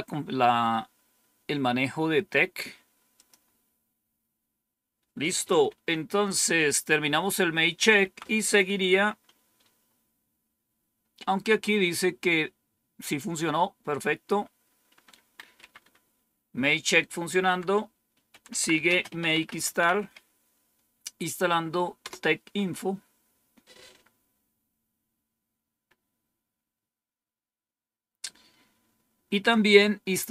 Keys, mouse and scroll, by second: 3.0 click, 5.2 click, 5.6 Home, 7.9 End, 13.4-14.8 scroll down 3, 15.5 Up, 17.2 Down, 18.0-20.4 typing.